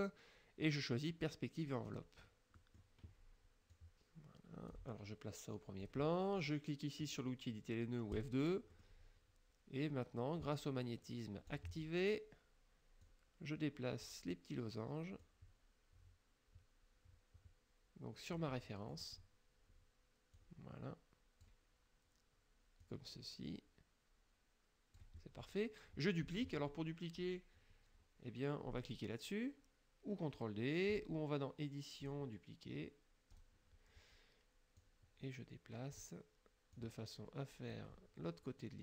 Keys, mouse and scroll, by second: 1.9 click, 2.6 click, 3.8-5.0 drag, 5.9 click, 8.2 click, 8.8 middle click, 11.5 click, 13.0-14.3 drag, 15.3-19.2 drag, 18.6 middle click, 20.4-21.7 drag, 22.9-25.2 drag, 32.1 click, 33.4 click, 34.9-36.2 drag, 36.8 click.